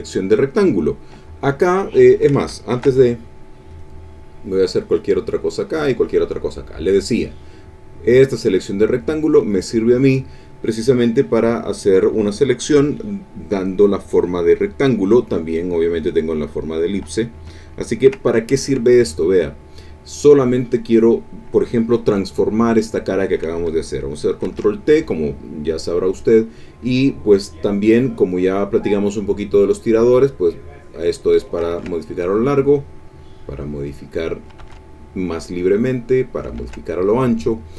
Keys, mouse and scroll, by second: 2.7 ctrl+shift+a, 3.7 click, 4.5 click, 5.3 click, 6.9 click, 7.9-9.3 drag, 9.8 middle click, 10.6 middle click, 14.8 middle click, 18.9 click, 24.4 ctrl+t, 30.2-31.7 drag, 31.7 ctrl+z, 32.3-34.6 drag, 34.5 ctrl+z, 35.5-36.6 drag, 36.5 ctrl+z.